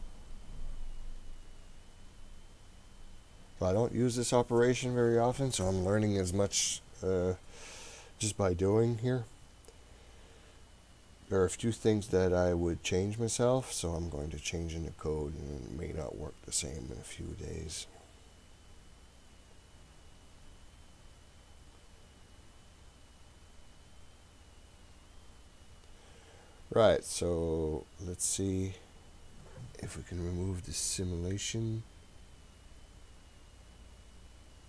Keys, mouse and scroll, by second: 33.7 click.